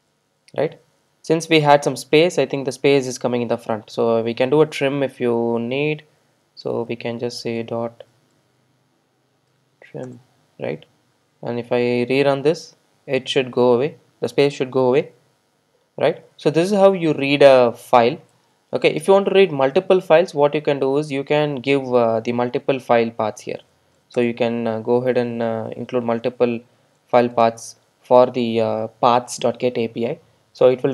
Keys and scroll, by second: 10.1 Return, 12.0 super+r, 21.0 ctrl+shift+super+F12.